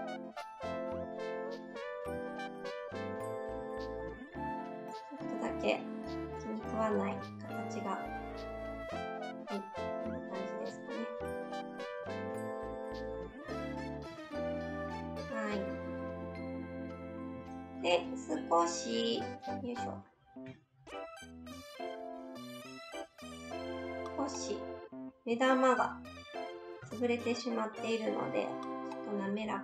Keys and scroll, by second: 3.5 s, 10.7 z, 11.0 z, 13.4 shift+s, 20.4 alt+s, 26.8 alt+s.